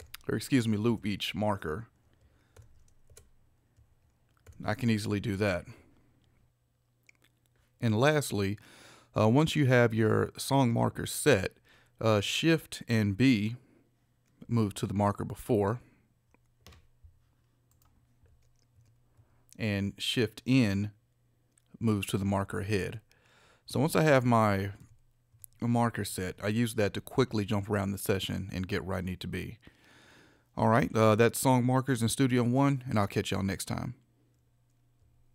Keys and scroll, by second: 0.0 shift+p, 0.9 shift+Right, 2.6 shift+p, 3.1 shift+Right, 4.5 shift+p, 15.6 shift+b, 18.8 shift+b, 22.8 shift+n, 25.3 shift+b.